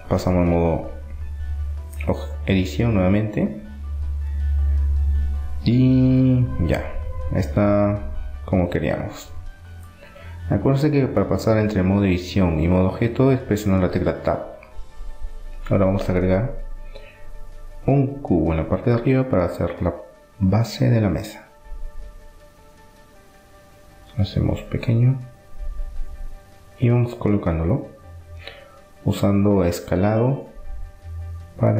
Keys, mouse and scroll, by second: 2.0 middle click, 2.7-4.8 middle drag, 7.3-12.3 middle drag, 7.7 Tab, 13.3-15.3 drag, 14.8 shift+a, 19.0-20.3 middle drag, 20.3-22.0 drag, 22.3 s, 25.3-27.0 middle drag, 27.0 s.